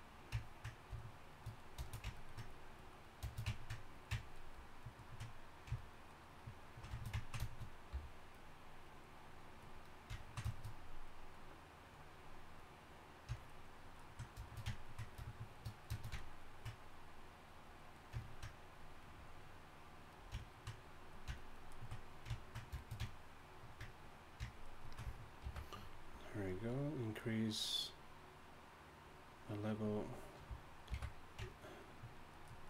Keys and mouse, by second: 2.5-5.9 drag, 7.9 f, 8.9-14.7 drag, 17.9 click, 20.1-23.1 drag, 23.2-24.0 middle drag, 24.0-25.4 drag, 25.4 alt+m, 30.9 alt+m.